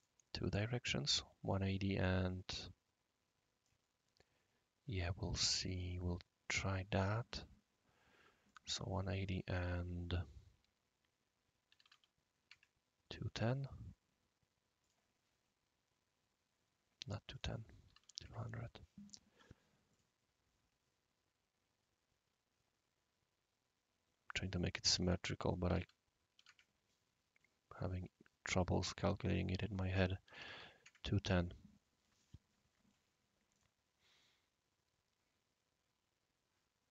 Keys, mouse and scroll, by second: 1.7-3.7 right drag, 8.4 click, 11.7 typing, 12.4 Tab, 14.8 click, 15.7 scroll up 1, 15.7 scroll down 1, 15.8-16.4 scroll up 1, 16.4 scroll down 1, 17.3 click, 17.7-18.5 typing, 19.9 click, 19.9-20.7 typing, 20.2 click, 25.6-27.1 typing, 29.7 click, 30.2 typing, 30.8 Tab, 33.5-35.3 drag, 34.2-36.9 right drag.